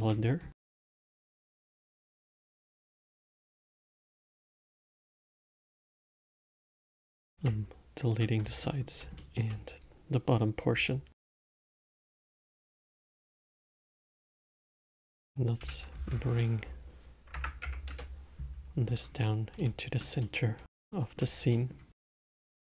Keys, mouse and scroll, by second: 0.1-0.7 alt+middle drag, 0.7-1.7 scroll up 4, 1.7-2.1 scroll down 1, 2.1-2.5 middle drag, 2.5 Tab, 2.9 Tab, 3.3-4.5 alt+middle drag, 4.5 3, 5.4 alt+click, 6.3 alt+click, 7.0 alt+middle click, 7.8 x, 9.0-10.1 alt+middle drag, 10.1 click, 11.1 x, 12.3 middle click, 12.8 click, 14.2 g, 20.0-22.3 alt+middle drag, 22.3-22.7 scroll up 2.